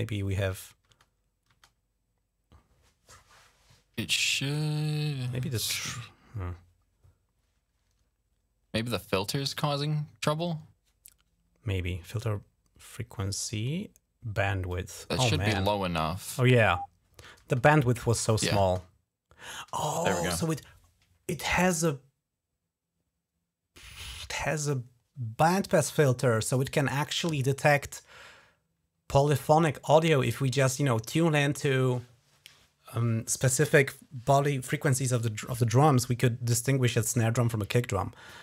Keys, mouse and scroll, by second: 0.6 space, 1.3 space, 9.2 click, 14.5 click, 15.3 space, 17.2 space, 17.4-18.7 drag, 18.4 space, 19.3 space.